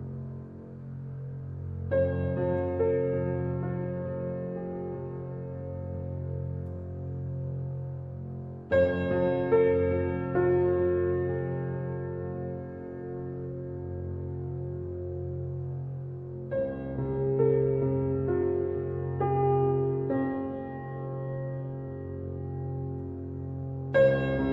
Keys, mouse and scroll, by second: 0.7-1.8 middle drag, 1.8 s, 6.8-8.3 middle drag, 8.3 Tab, 8.7-11.8 middle drag, 11.8 scroll down 3, 12.1 scroll up 1, 12.2-12.7 middle drag, 12.7-13.1 scroll up 2, 13.1-16.6 shift+middle drag, 17.6 click, 19.3-21.1 middle drag, 21.1-21.7 drag, 21.7 middle click, 22.6 KP_3.